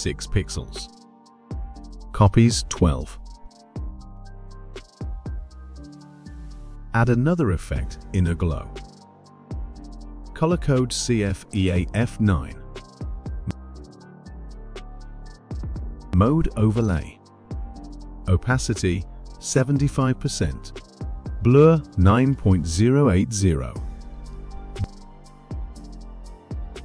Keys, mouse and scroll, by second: 0.0-2.0 typing, 2.9 click, 3.2-4.0 typing, 4.6 click, 6.8 click, 8.0 click, 9.6 click, 10.9 click, 12.1-13.8 typing, 14.2 click, 16.5 click, 19.0 click, 19.6 typing, 20.7 click, 21.7 click, 22.4-22.8 typing, 24.0-24.7 typing, 25.9 click.